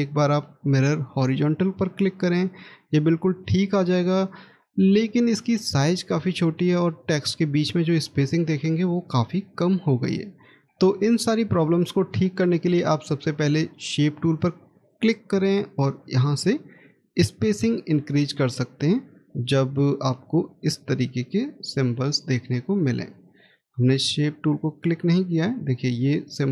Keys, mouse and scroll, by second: 6.2 scroll up 1, 10.3-10.6 scroll down 1.